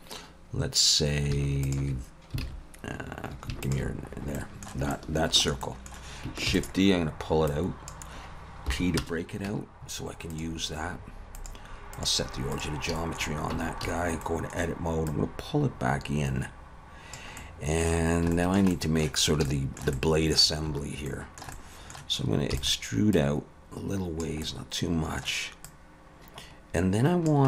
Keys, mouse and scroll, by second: 1.6 alt+shift+click, 2.4 alt+a, 3.6 alt+shift+click, 4.1-4.4 scroll down 3, 4.4 middle click, 4.9 shift+middle click, 5.6 middle click, 6.5 shift+d, 7.5 click, 8.7 p, 9.5 Tab, 10.3 click, 11.4 click, 13.0 shift+middle click, 13.5 Tab, 13.8 a, 14.2 middle click, 15.1 click, 17.4 middle click, 18.0-18.3 scroll down 3, 18.3 shift+middle click, 18.7 middle click, 19.5 shift+middle click, 20.0 middle click, 21.1 shift+middle click, 21.5 middle click, 22.5 e, 23.1 click, 24.4 middle click, 25.7 click.